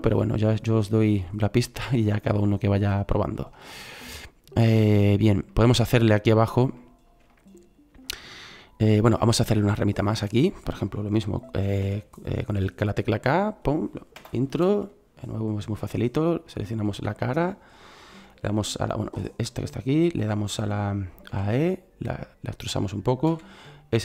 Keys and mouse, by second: 5.2 middle click, 6.2 middle click, 9.9-11.7 middle drag, 11.7 k, 17.1-21.2 middle drag, 21.2 e, 23.3 s.